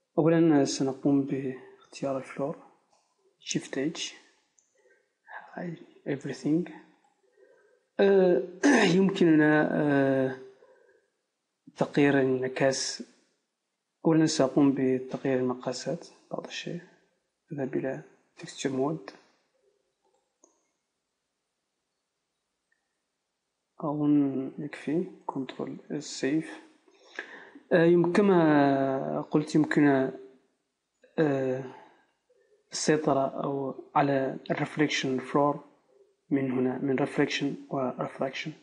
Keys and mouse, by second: 1.2-3.7 right drag, 3.7 shift+h, 14.5 Tab, 17.7-21.8 drag, 20.8 s, 25.3-38.6 drag, 25.8 ctrl+s.